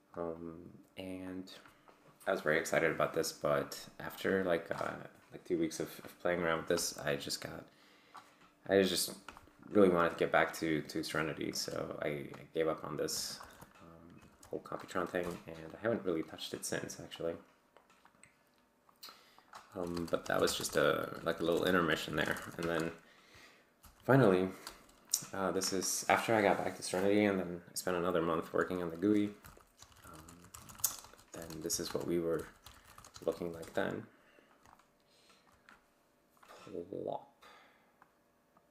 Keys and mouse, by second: 0.4 click, 3.6 click, 13.4 ctrl+alt+g, 14.3 ctrl+alt+f, 15.2 F12, 17.2 click, 18.1 click, 18.9 click, 19.4 click, 19.6-22.9 typing, 23.8 ctrl+l, 24.6 Return, 29.2-33.5 typing, 30.0 ctrl+d, 30.8 shift+Tab, 32.8 ctrl+., 32.9 Tab, 33.2 ctrl+l, 33.6 Return, 34.7 alt+click, 38.0-38.7 drag.